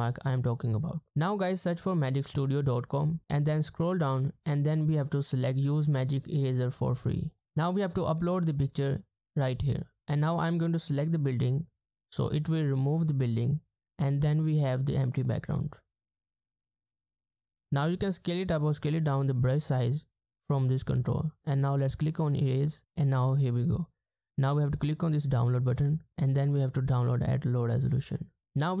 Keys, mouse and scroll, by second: 1.1-2.8 scroll up 1, 2.8 scroll down 1, 7.4 double click.